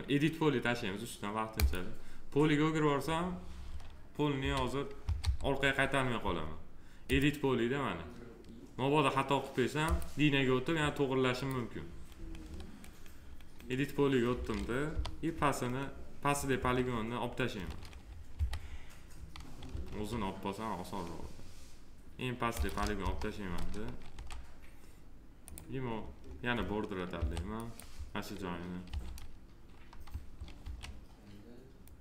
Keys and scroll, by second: 4.3 e, 14.8 p, 18.3 4, 19.8 alt+q, 22.9 Delete, 27.1 3, 28.8 r, 30.5 w.